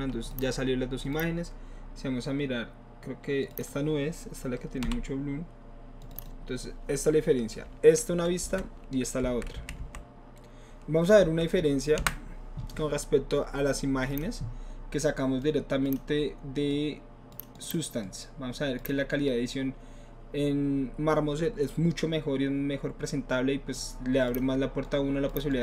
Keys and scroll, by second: 4.9 Delete, 8.5 Right, 9.5 Left, 9.7 Left, 11.2 Right, 11.9 Left, 14.1 Left.